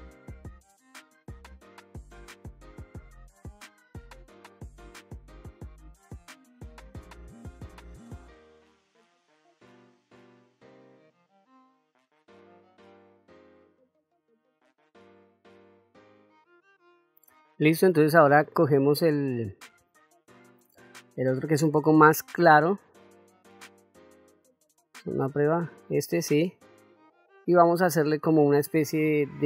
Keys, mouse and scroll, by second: 1.6 middle click, 1.7 click, 1.8 f, 2.0 click, 2.4 middle click, 2.6 middle click, 2.8 shift+middle click, 3.3-4.5 drag, 4.5 middle click, 4.6 click, 5.3 click, 5.3 middle click, 6.2 middle click, 6.3-7.8 drag, 8.0 middle click, 8.1 click, 8.9 middle click, 9.0-10.0 drag, 10.0 middle click, 10.2 middle click, 10.6 click, 10.7 middle click, 10.9 middle click, 11.0-12.2 drag, 12.4 middle click, 12.9 click, 13.7 middle click, 13.9 click, 15.0 middle click, 15.1 click, 15.4 middle click, 15.6 click, 23.0 click, 25.0 click, 26.3 middle click.